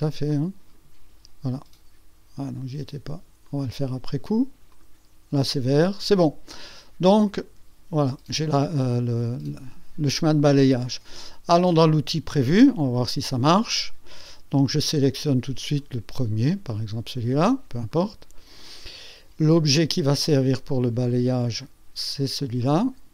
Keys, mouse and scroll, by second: 0.3-1.0 drag, 2.4 click, 3.4 click, 3.9 click, 4.7 click, 5.2 click, 5.9 click, 6.8 click, 12.4 click, 15.8 click, 17.9 click, 21.1 click, 22.6 click.